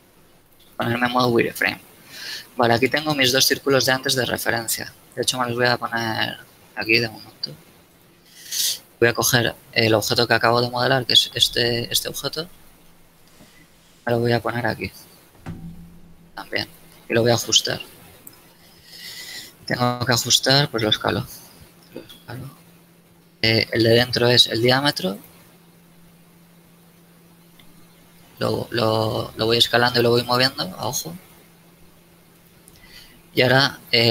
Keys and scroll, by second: 1.0 z, 2.9 Tab, 5.3 g, 11.3 z, 13.6 z, 15.3 g, 18.9 Tab, 19.9 Tab, 20.6 s, 27.6 g, 33.3 Tab.